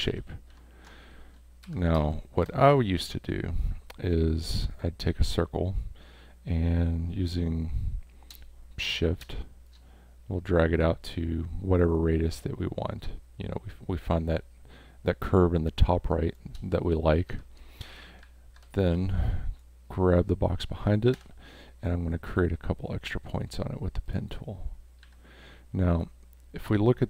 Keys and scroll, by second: 0.1 ctrl+y, 1.6 v, 2.0 space, 17.3 v, 18.6 space, 21.1 p, 25.0 a.